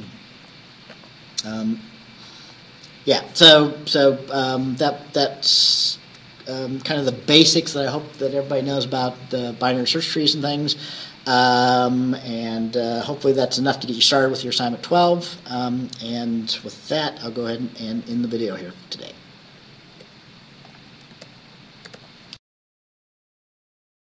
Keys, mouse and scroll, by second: 0.4 Right, 1.0 Left, 2.5-2.9 scroll down 2, 20.0 Escape, 20.7 click, 21.2 alt+Tab, 21.9 alt+Tab, 22.8 click.